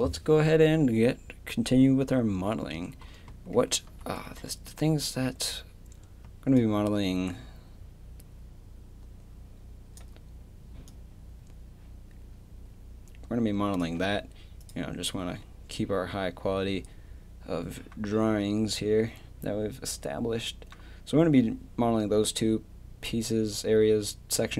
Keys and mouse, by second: 3.0-6.2 middle drag, 6.2 d, 6.6-9.4 drag.